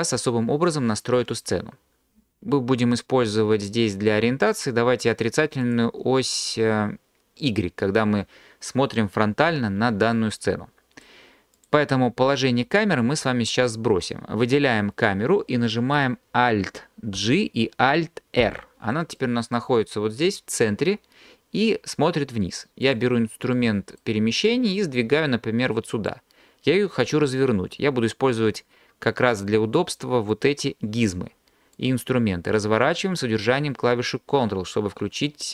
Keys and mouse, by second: 5.6 click, 11.6 click, 19.2 drag, 22.8 click, 30.3 click, 31.8 click.